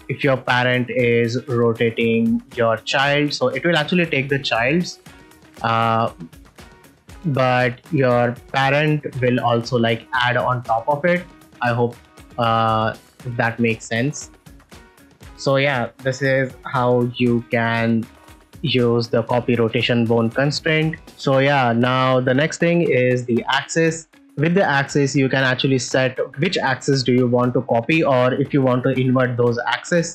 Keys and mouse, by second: 2.3 right click, 4.9 r, 5.1 r, 6.1 click, 7.0 r, 8.0 click, 8.7 click, 9.0 r, 9.2 r, 13.5 click, 13.9-15.1 middle drag, 15.8 a, 16.8 alt+g, 17.1 alt+r, 17.9 middle drag, 19.4 click, 29.8 middle drag.